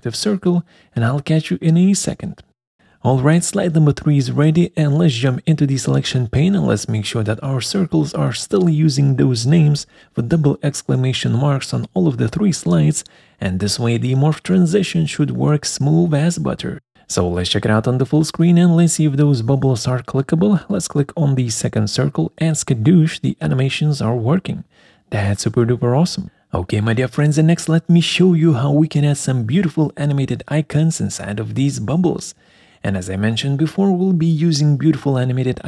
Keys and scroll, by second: 6.0 Up, 6.0 Escape, 9.6 Up, 9.7 Escape, 12.1 Up, 12.2 Escape.